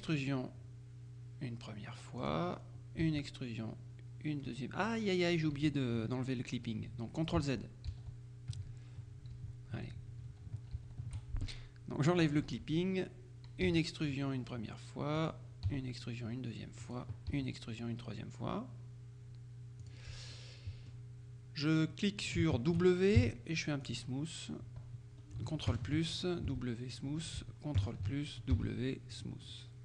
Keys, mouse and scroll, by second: 2.3 click, 2.6-3.2 scroll down 1, 3.1 e, 5.6 Escape, 7.4 ctrl+z, 9.4 z, 10.8 shift+z, 12.3 click, 13.7 e, 15.2 click, 15.8 e, 16.9 click, 17.4 e, 19.9 click, 20.4 middle click, 22.0 middle click, 22.5 shift+click, 23.3 shift+w, 23.9 click, 25.8 ctrl+KP_Add, 26.6 w, 27.0 click, 27.9 ctrl+KP_Add, 28.6 ctrl+w, 29.2 click, 29.6 right click.